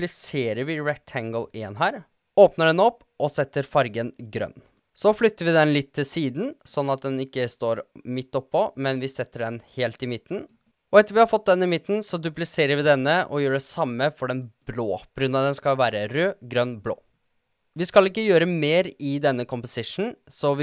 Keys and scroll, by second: 0.4 super+d, 10.0 Page_Up, 10.2 Page_Up, 10.5 Down, 10.8 super+d, 13.1 0, 13.9 0, 15.6-16.4 typing.